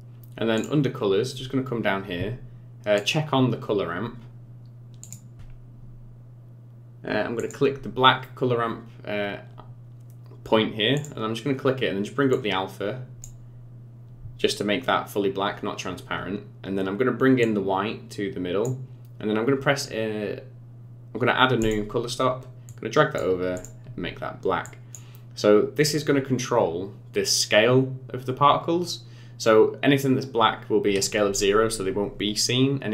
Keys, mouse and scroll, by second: 0.6 click, 1.0-2.2 scroll down 7, 3.0 click, 3.6-4.3 scroll down 2, 4.3-4.8 scroll down 2, 5.0 click, 5.4-6.0 scroll down 4, 7.4 click, 10.9 click, 17.4 click, 21.6 click, 22.7 click, 23.5 click, 26.0-26.4 scroll up 4, 28.5-31.7 scroll up 2.